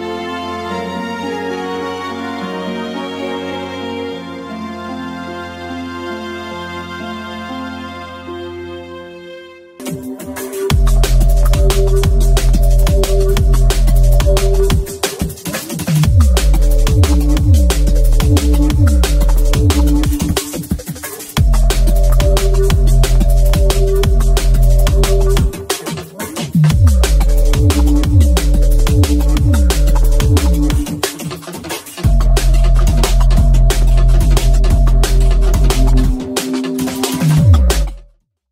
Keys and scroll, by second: 0.4 x, 0.9 x, 1.5 x.